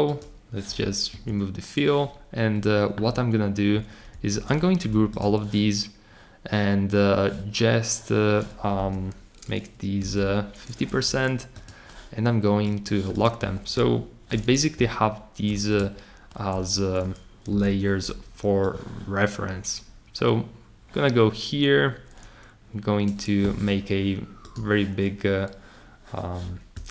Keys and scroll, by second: 4.1 super+g, 8.7 Escape, 10.0 5, 17.5 r.